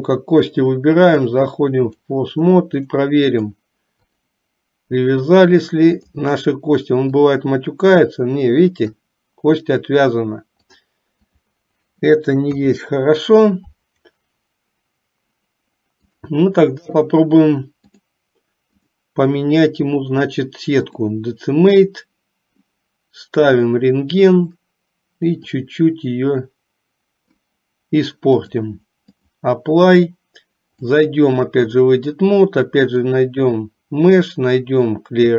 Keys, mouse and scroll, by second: 0.0 click, 1.2-2.3 drag, 3.3 middle click, 6.1 click, 7.4-9.2 drag, 10.9 click, 12.6 KP_3, 16.3 click, 18.0 click, 18.9-21.3 drag, 23.8 click, 25.7-27.5 drag, 28.4-29.5 drag, 31.1-32.2 drag, 32.9-35.3 drag.